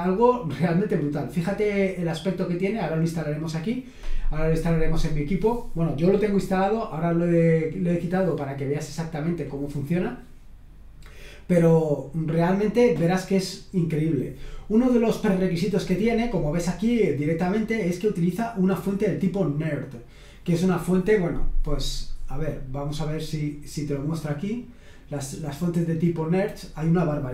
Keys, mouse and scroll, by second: 1.7-2.7 scroll down 1, 18.1-19.1 scroll down 2, 23.7 click.